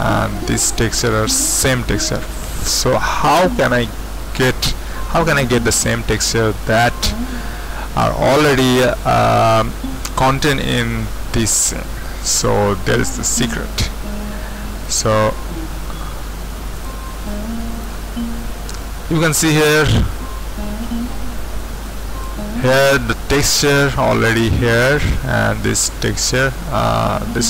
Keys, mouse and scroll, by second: 14.8-17.7 drag, 17.9 click, 18.8-21.8 middle drag, 21.8-23.7 drag, 27.0-27.4 scroll down 2.